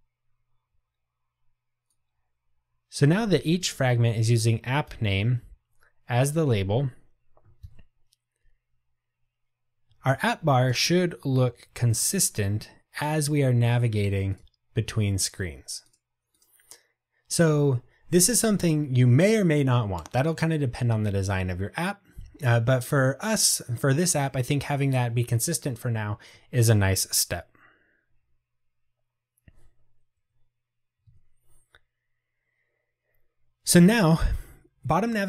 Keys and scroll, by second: 5.0 Return, 6.4 ctrl+r.